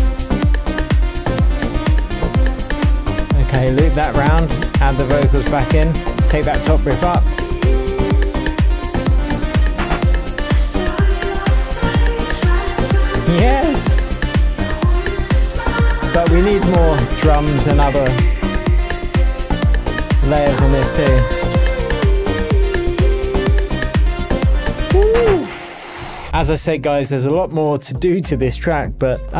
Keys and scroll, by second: 1.9 shift+super+j, 9.1 super+a, 9.4 shift+super+Up, 10.2 shift+Up, 10.8 shift+Tab, 20.9 |, 25.4 space.